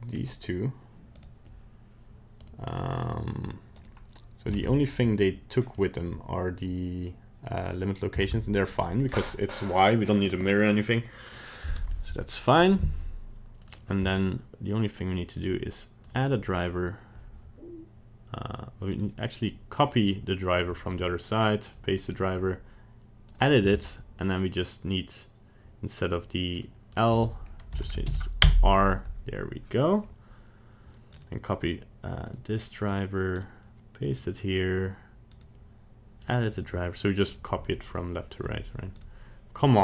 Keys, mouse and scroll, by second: 0.1 scroll up 1, 1.1 right click, 2.4 click, 3.8 right click, 4.5 ctrl+Tab, 4.8 right click, 5.7 click, 8.2 ctrl+Tab, 8.7 right click, 12.6 right click, 13.6 click, 15.3 right click, 18.5 click, 18.9 right click, 20.5 click, 20.9 right click, 22.5 right click, 31.1 right click, 32.9 click, 33.3 right click, 35.3 right click, 37.2 right click, 38.9 right click.